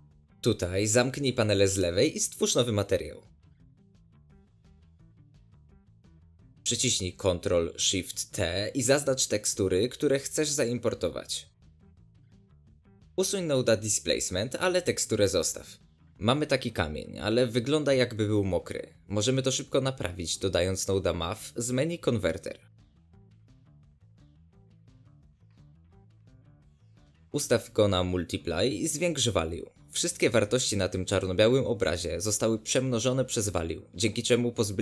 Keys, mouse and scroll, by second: 2.8-4.1 right drag, 4.1 scroll up 1, 4.3 middle drag, 4.4 shift+scroll down 1, 4.5 scroll up 1, 4.8 shift+middle click, 5.4-7.2 drag, 7.6 ctrl+shift+t, 12.4 click, 15.1 click, 15.7 x, 23.6-24.5 middle drag, 24.5 scroll up 1, 24.6-26.2 middle drag, 26.2-30.1 drag, 30.1-31.2 middle drag, 31.2-33.9 drag, 33.9-34.8 middle drag.